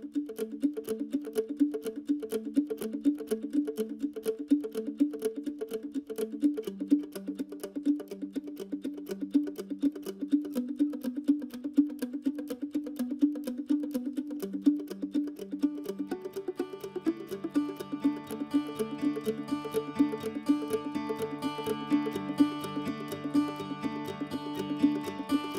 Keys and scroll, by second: 9.7-10.8 typing, 14.6 Escape, 15.0 Escape.